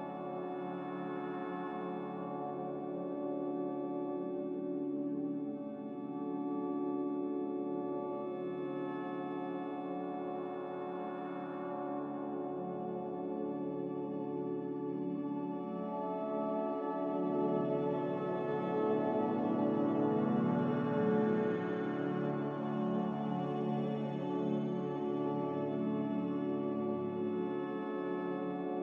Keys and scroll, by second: 3.5 z, 4.5 c, 6.1 n, 8.6 x, 9.6 Return, 9.6 5, 12.6 z, 12.6 1, 12.6 0, 13.6 Return, 16.2 n, 25.0 ctrl+z.